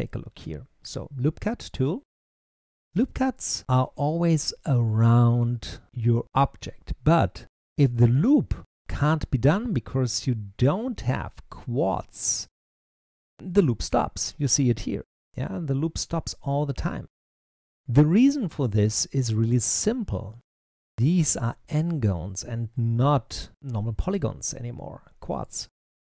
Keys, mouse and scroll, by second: 2.3-5.8 middle drag, 8.8-11.8 middle drag, 18.5-21.5 middle drag, 23.1-25.3 middle drag.